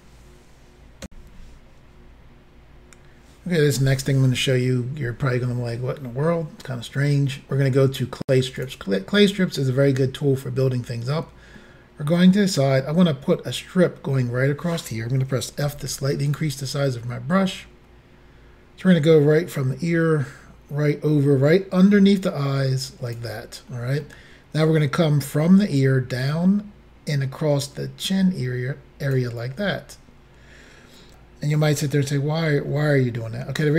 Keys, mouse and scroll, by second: 1.1 Insert, 8.6 click, 11.6 middle click, 15.7 f, 16.3 click, 19.6 click, 23.7 middle click, 25.8 click, 29.7 middle click, 32.9 middle click.